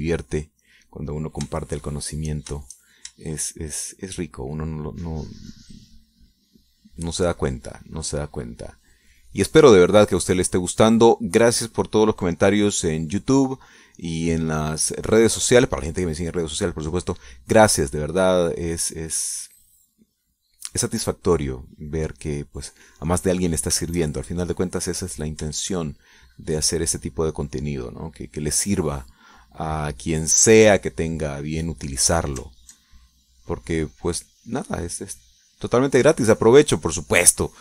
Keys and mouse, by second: 1.3 click, 2.3 shift+click, 3.3 shift+click, 4.0 shift+click, 4.8-20.1 shift+drag, 20.4-23.6 drag, 23.7 middle click, 24.9-32.5 shift+drag, 33.4 ctrl+click, 34.4-37.6 drag.